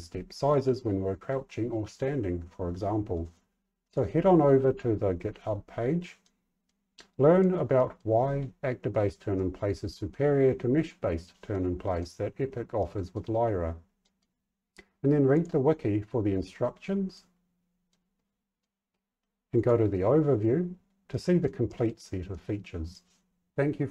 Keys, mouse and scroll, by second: 3.8 click, 6.2 middle click, 7.0 middle click, 7.7 middle click, 9.3 middle click, 11.5 middle click, 12.7 middle click, 14.0 middle click, 15.3 click, 17.1 middle click, 18.1 middle click, 19.5 click, 21.0 middle click, 21.6 middle click, 22.2 middle click.